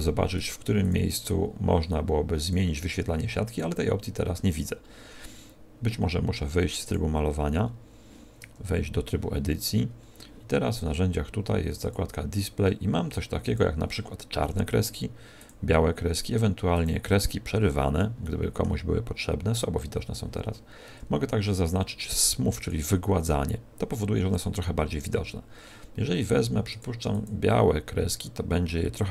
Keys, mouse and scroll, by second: 0.3 click, 0.7 click, 1.1 click, 2.3 click, 3.4 click, 4.3-4.7 scroll down 7, 5.1 scroll down 1, 6.8 click, 7.5-7.9 scroll up 4, 8.4 Tab, 9.6-10.1 scroll down 7, 10.5-11.1 scroll up 8, 11.7 click, 13.4 click, 15.3 click, 16.7 click, 17.5-18.1 scroll up 4, 18.2 middle click, 22.5 click, 24.3 click, 26.7 click, 27.1 click.